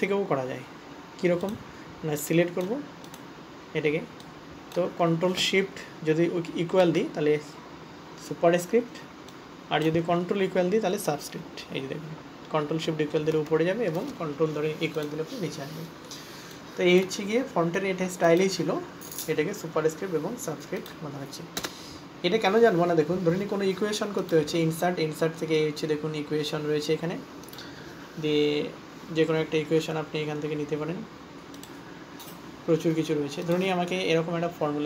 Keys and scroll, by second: 7.1 ctrl+shift+=, 11.1 ctrl+shift+=, 11.8 ctrl+=, 13.4 shift+=.